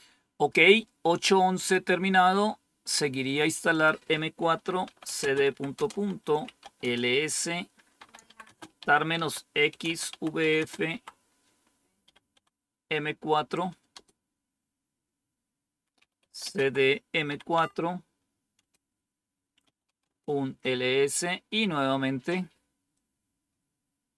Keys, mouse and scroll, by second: 1.6 click, 3.6 click, 4.5-10.8 typing, 11.9 typing, 13.8 typing, 15.9-20.0 typing, 22.8-24.1 drag.